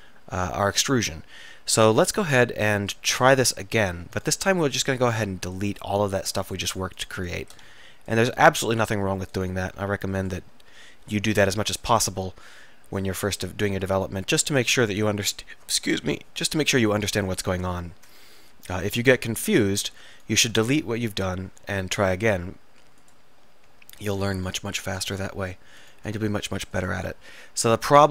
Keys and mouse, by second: 2.4-7.7 middle drag, 7.7 x, 9.7 x, 11.1 click, 13.0-14.1 middle drag, 14.1-16.6 middle drag, 18.0 middle click, 19.5-21.9 middle drag, 22.3 s, 24.8 middle click, 26.3 s, 27.3 middle click.